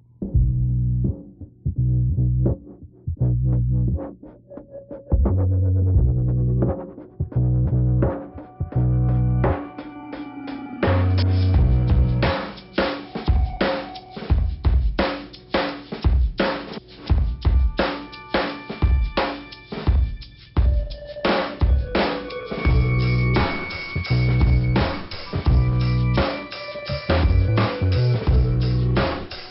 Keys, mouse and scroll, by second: 0.0 scroll down 1, 1.5 middle click, 2.5 click, 3.9 click, 4.9 click, 6.0 click, 8.4 click, 9.3 click, 10.5 click, 11.8 click, 12.5 click, 13.1-13.7 scroll down 1, 16.8-17.5 scroll up 2, 17.5 click, 19.1 right click, 19.6 click, 19.9 click, 21.9 click, 22.5 middle click, 24.7 click, 24.9 click, 26.4 right click, 27.1 click.